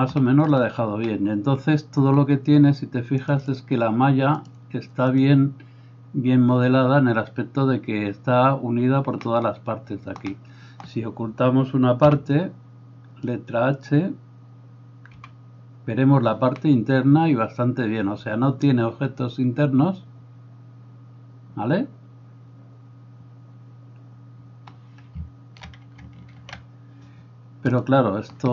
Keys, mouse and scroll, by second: 3.3-27.9 drag, 10.4-17.5 middle drag, 12.1 b, 16.1 h, 18.0-20.9 middle drag, 21.8 middle click, 27.6 alt+h, 27.9-28.5 middle drag.